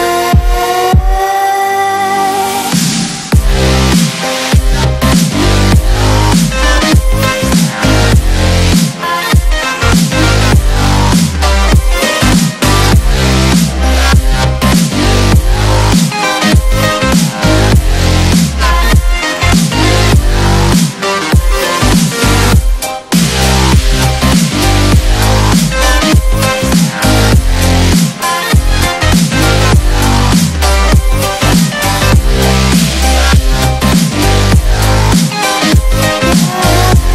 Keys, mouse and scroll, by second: 0.5-2.0 shift+drag, 3.9 space, 4.2 click, 4.2 space, 5.6-6.8 shift+drag, 8.3 click, 12.7 BackSpace, 13.5-16.7 drag, 17.4 space, 17.6-18.0 click, 17.8 space, 20.6-21.5 drag, 22.5 space, 23.2-25.7 drag, 29.7 click, 29.9 right click, 30.8-36.3 drag.